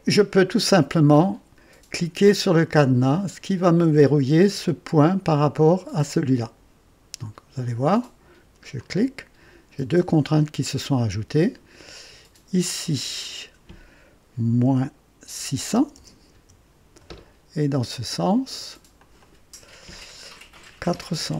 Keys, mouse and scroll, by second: 8.7 click, 12.6 click, 14.6 KP_Subtract, 15.3 KP_6, 15.7 KP_0, 16.3 Return, 18.1-18.8 drag, 19.0 click, 20.8 KP_4, 21.1 KP_0.